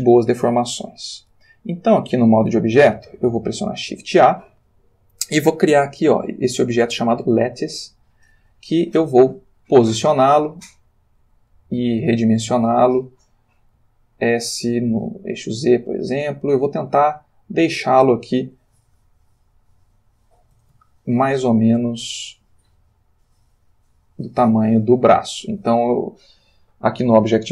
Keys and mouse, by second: 3.7 shift+a, 7.4 click, 9.5 g, 10.9 click, 12.1 s, 13.5 click, 13.8 s, 14.9 z, 16.5 click, 16.6 g, 18.2 click, 18.8 s, 19.8 click, 20.5 s, 20.7 x, 24.1 click, 24.4 g, 25.4 click.